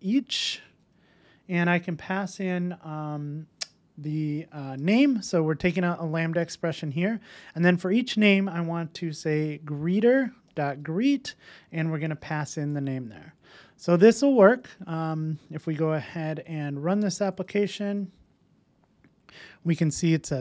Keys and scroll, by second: 10.0 Return, 15.6 super+s.